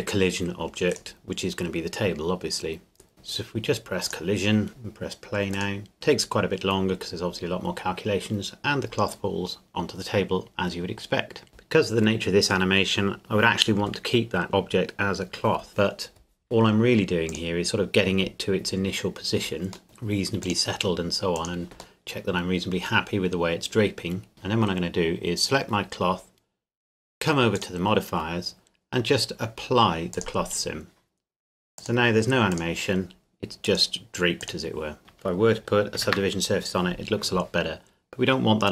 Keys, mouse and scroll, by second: 0.9 right click, 4.1 click, 17.3 click, 19.8 middle click, 20.4 click, 22.0 middle click, 24.3 click, 27.5 click, 30.1 click, 35.9 ctrl+2.